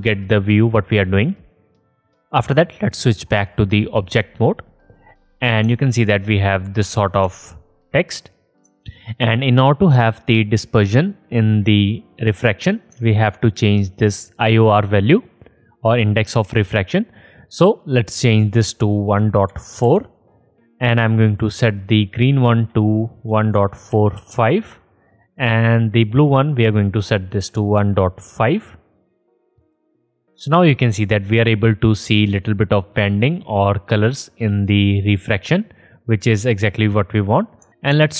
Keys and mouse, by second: 3.2-4.3 drag, 3.2-4.3 middle drag, 3.2-4.3 right drag, 7.2-8.5 alt+drag, 10.3-12.6 alt+drag, 13.0 alt+click, 15.2-20.0 alt+shift+drag, 20.0-23.0 middle drag, 23.0-24.2 drag, 27.9 click, 31.6-37.7 drag.